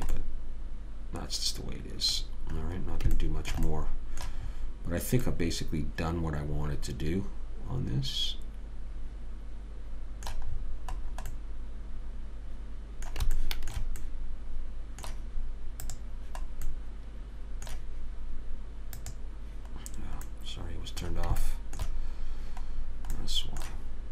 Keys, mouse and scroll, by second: 0.3 middle click, 0.7-1.8 middle drag, 3.1-7.8 middle drag, 11.2-12.5 middle drag, 16.2 click, 17.0-18.9 middle drag, 17.0-18.9 right drag, 19.3 click, 20.3 middle click, 20.7 click, 20.7 right click, 21.4-24.1 middle drag.